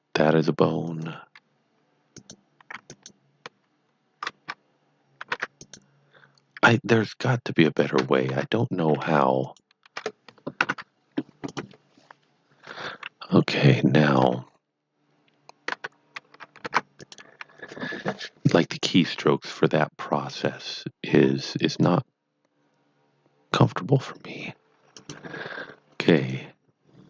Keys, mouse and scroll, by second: 0.9 click, 2.1 click, 2.8 ctrl+click, 5.4 Tab, 5.6 click, 7.6 shift+click, 8.3 Tab, 9.4 shift+click, 11.5 click, 14.2 Tab, 15.7 Tab, 16.6 Tab, 17.0 click, 20.2 click, 20.3 click, 24.9 click.